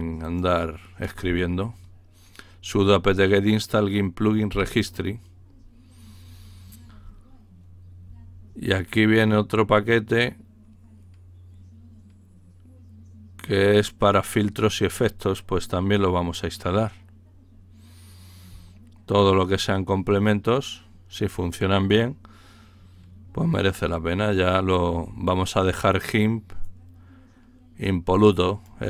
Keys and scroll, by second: 4.5 Return.